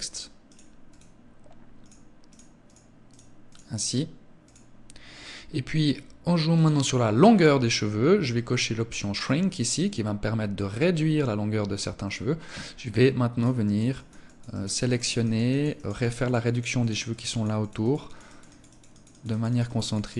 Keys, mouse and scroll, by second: 0.2 click, 2.0 click, 2.4 click, 3.7 click, 5.8 click, 8.4 click, 9.9 middle click, 12.3 click, 12.9 click, 13.5 click, 13.8 click, 14.5 click, 14.8 click, 15.3 click, 15.5 click, 15.9 click, 16.1 click, 16.4 click, 16.7 click, 16.9 click, 17.1 click, 17.3 click, 18.0 click, 18.6 click, 18.8 click, 19.1 click, 19.3 click, 19.7 click, 19.9 click.